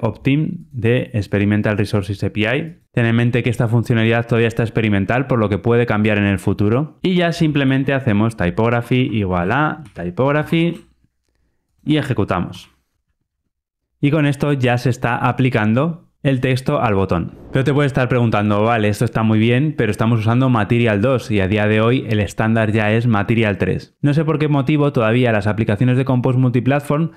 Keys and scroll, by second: 8.6 Return, 12.4 ctrl+r.